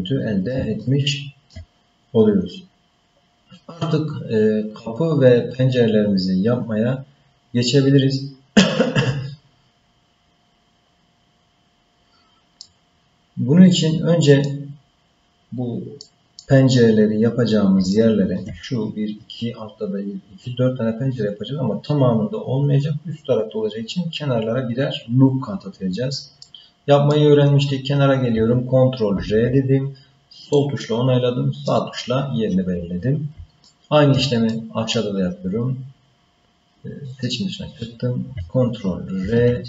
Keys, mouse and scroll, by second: 0.8 shift+middle click, 3.0-3.8 scroll up 2, 12.6-14.4 middle drag, 16.0 middle click, 16.8-17.1 scroll up 2, 17.9 shift+middle click, 26.4 middle click, 29.1 ctrl+r, 33.7 shift+middle click, 34.5 middle click, 37.1 click, 39.2 ctrl+r.